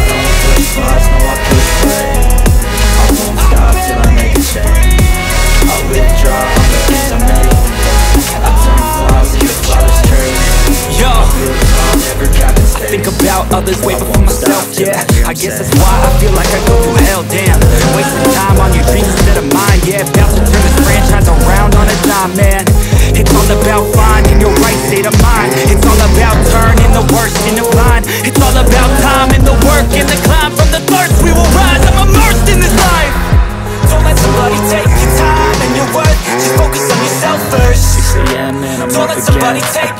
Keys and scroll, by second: 5.5 1, 5.9 0, 6.3 Return, 13.0 space, 14.2 ctrl+k, 14.7 Escape, 18.5 9, 19.5 ctrl+space, 25.8 c, 26.5 Escape, 27.4 F2, 33.8 F3.